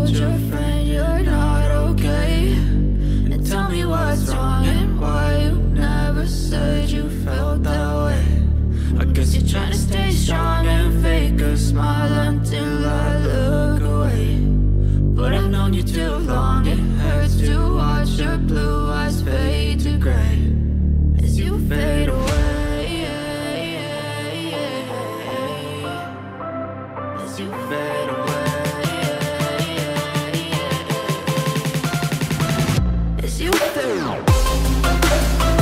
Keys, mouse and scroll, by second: 2.2 alt+space, 2.7 alt+space, 4.0-5.2 scroll down 1, 5.4 space, 7.4-7.8 scroll up 2, 7.8 middle click, 8.7-9.1 scroll up 2, 9.1 middle click, 11.8 g, 12.6 click, 13.6-14.2 scroll down 2, 14.8-15.2 scroll down 3, 15.7 alt+space, 18.4 space, 19.4 space, 21.2 click, 22.1 space, 24.9 space, 26.9 click, 28.0 click, 29.3 alt+space, 30.1 alt+space.